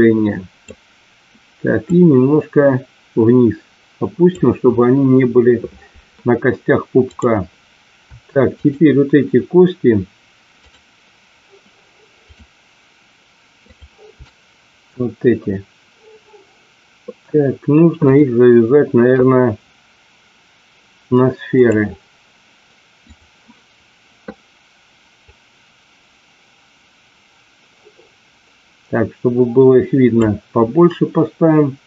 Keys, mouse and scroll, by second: 1.8-4.3 drag, 8.4 shift+click, 10.5 shift+click, 12.3 shift+click, 13.5 shift+click, 18.0-21.8 drag, 23.0-23.4 drag, 25.2-30.0 drag.